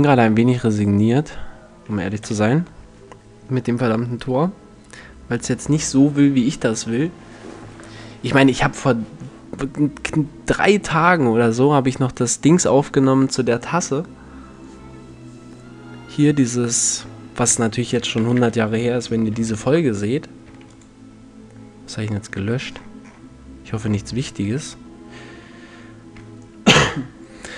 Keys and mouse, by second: 1.8 n, 17.2-19.0 drag, 17.8 shift+c, 18.9 shift+x, 20.1 x, 24.1 shift+a.